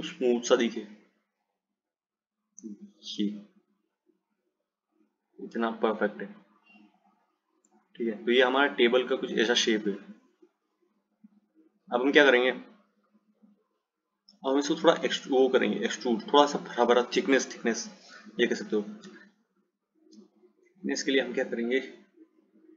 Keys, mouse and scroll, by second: 8.4 click, 14.1 click, 21.4 click.